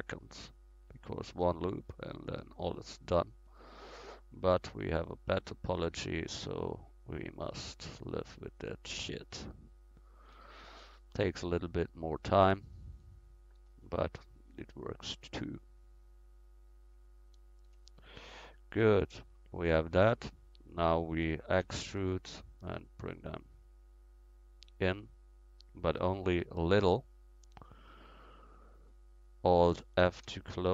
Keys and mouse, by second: 1.7-7.5 middle drag, 7.5-10.6 right drag, 10.6 middle click, 11.5 middle click, 12.2-14.8 middle drag, 17.3 right click, 17.8 middle click, 18.1 middle click, 18.6 middle click, 21.6 e, 22.6-24.8 drag, 26.4 middle click, 30.0 alt+f.